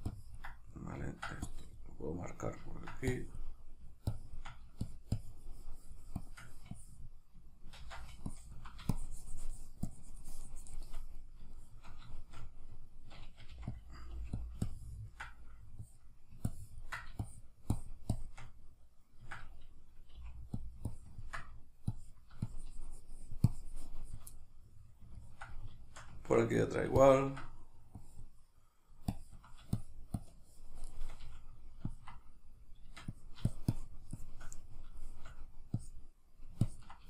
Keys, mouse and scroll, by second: 0.1 ctrl+click, 0.7 middle click, 1.5 click, 2.4 middle click, 3.1-11.2 drag, 7.8 ctrl+z, 11.2-13.8 middle drag, 13.5 f, 13.8 click, 14.1 f, 14.6-20.6 ctrl+drag, 20.2 f, 20.9-24.3 ctrl+drag, 24.3-27.0 middle drag, 27.0-34.7 ctrl+drag, 34.7-35.8 shift+middle drag, 35.8-37.0 drag.